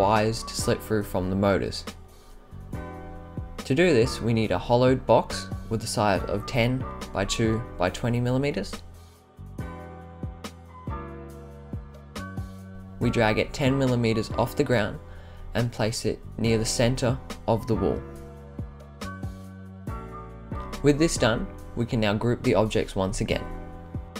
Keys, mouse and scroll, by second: 1.4 click, 2.5-6.4 drag, 7.4 click, 7.8 click, 8.4-8.8 right drag, 9.4-10.7 drag, 11.1-12.5 drag, 13.1-13.5 right drag, 14.4-16.9 drag, 19.1 click, 19.6-20.8 right drag, 21.6 click, 22.2 shift+click, 23.1 click, 24.0 click.